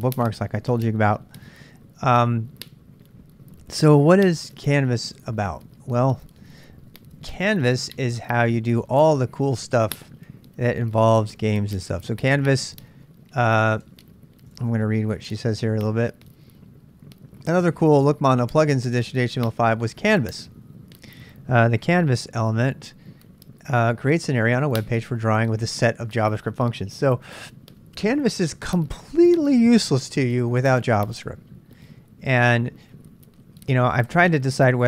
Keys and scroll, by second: 1.4 c, 1.6 Return, 7.4 super+Tab, 9.4 super+Tab, 13.8 super+Tab, 14.5 super+Tab.